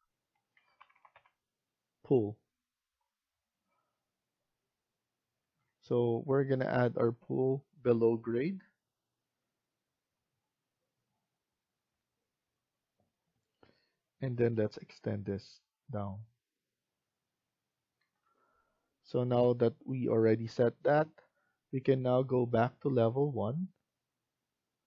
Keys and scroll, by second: 0.2-1.5 typing, 3.1-6.0 typing, 17.8 Escape, 18.1 Escape.